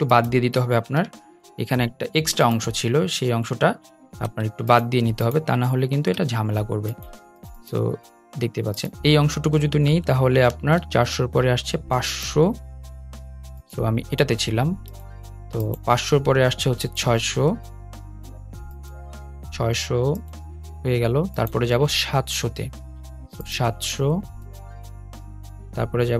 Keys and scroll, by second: 2.5 BackSpace, 3.9 super+z, 4.1 super+z, 5.4 BackSpace, 10.6 i.